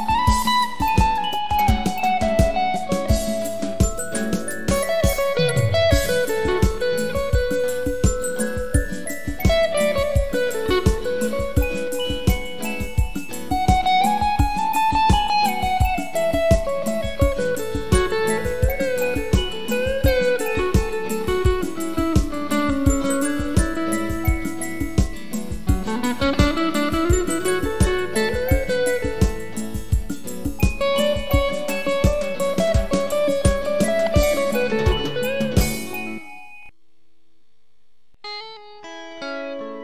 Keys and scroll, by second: 7.6-8.6 typing.